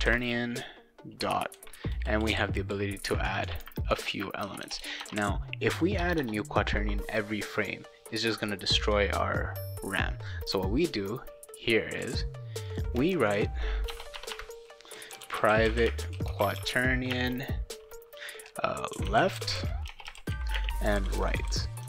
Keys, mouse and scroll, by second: 4.4-6.2 typing, 10.5 click, 11.6 click, 12.7 click, 13.3-17.1 typing, 14.1 Return, 14.3 Return, 18.9-21.8 typing.